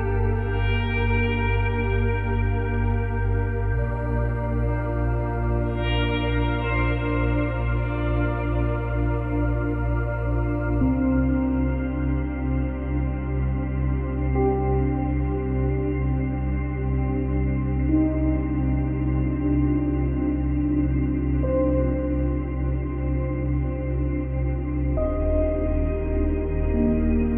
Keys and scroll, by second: 7.2 space, 10.1 space, 10.9 ctrl+c, 12.2 ctrl+v.